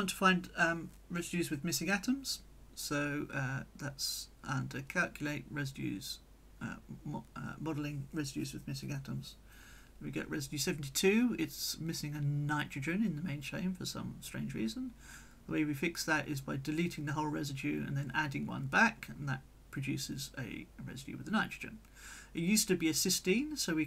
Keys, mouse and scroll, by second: 1.1 click, 2.0-3.2 drag, 3.2-5.0 middle drag, 5.0 click, 6.2 click, 7.5-11.6 right drag, 8.0-11.6 drag, 12.4 click, 12.8 middle click, 13.1-14.4 drag, 15.2 click, 16.0 click, 16.6 click, 18.0 click, 19.1 click, 20.1 click, 21.3 click.